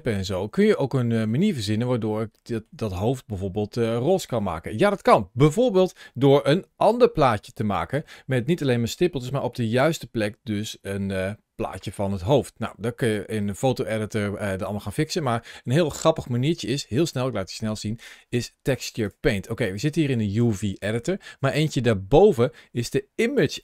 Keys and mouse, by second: 0.1 shift+middle click, 0.6 middle click, 2.2 shift+middle click, 2.7-4.3 middle drag, 19.0-23.2 drag.